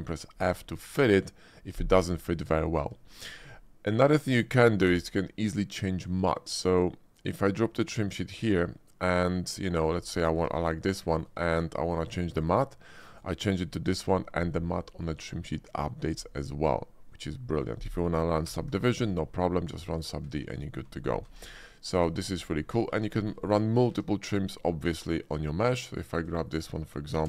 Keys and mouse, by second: 3.2 shift+click, 4.5 shift+click, 4.9 d, 10.3 Tab, 11.1 shift+middle click, 11.5-13.3 drag, 17.8 click, 18.5 ctrl+1, 19.8 drag, 20.2 Tab, 21.2 ctrl+b, 22.2 Tab, 22.7 middle drag, 23.2 shift+middle click, 23.5 click, 23.9 Tab, 25.9 alt+click, 26.3 shift+click, 26.6 click.